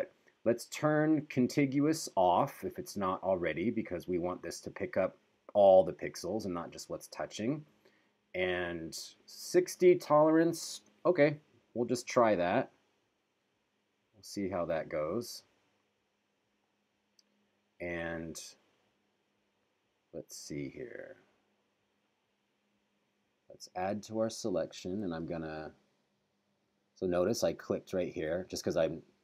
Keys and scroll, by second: 12.5 super+=, 25.2 super+=.